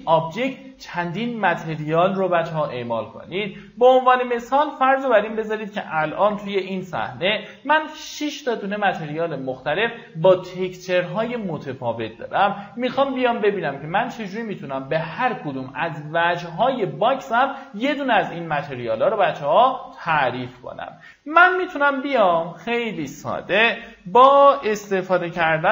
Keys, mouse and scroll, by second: 2.5 m, 3.7 click, 4.8 scroll down 1, 5.6 click, 6.3 Delete, 6.7 middle click, 7.0 scroll down 1, 10.4 scroll up 1, 11.8 middle click, 14.1 scroll up 1, 20.5 click, 21.3 click, 22.0 m, 23.2 click, 25.3-25.7 typing.